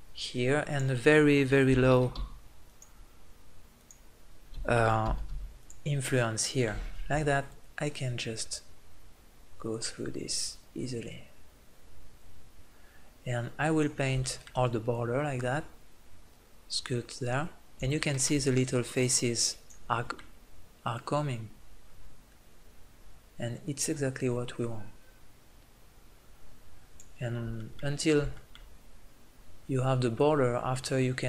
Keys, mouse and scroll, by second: 0.7-2.5 drag, 3.8-5.5 drag, 7.6-14.2 drag, 15.0-16.8 drag, 18.8 middle click, 19.7 click, 20.5-22.7 drag, 28.2 click, 30.2-31.2 drag.